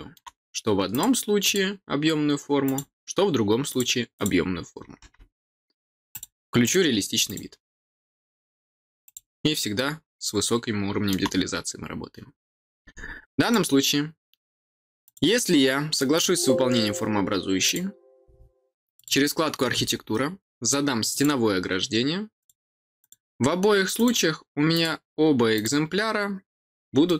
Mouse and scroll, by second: 0.9 click, 1.4 click, 2.6 click, 3.6 click, 4.1 click, 6.1 click, 6.6 click, 7.2 click, 9.0 click, 9.7-11.0 middle drag, 13.3 click, 15.0 click, 16.1 click, 17.6 click, 18.9 click, 21.1 click, 22.3 click, 22.9 click, 23.9 click, 24.7 click, 25.5 click, 27.0 middle click.